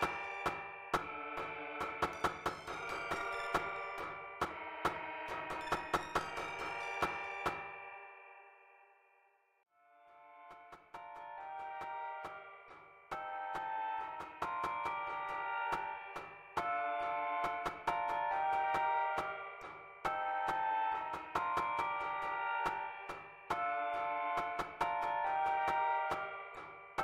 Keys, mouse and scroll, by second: 1.5 click, 2.0 click, 8.6 click, 11.4 click, 22.7 click, 23.9-25.5 drag, 26.8-27.0 drag.